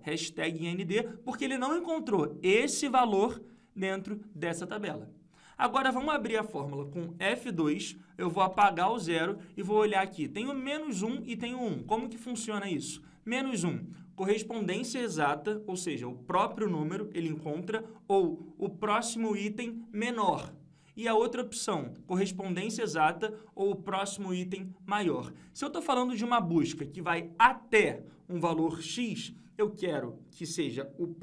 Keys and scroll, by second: 7.3 F2.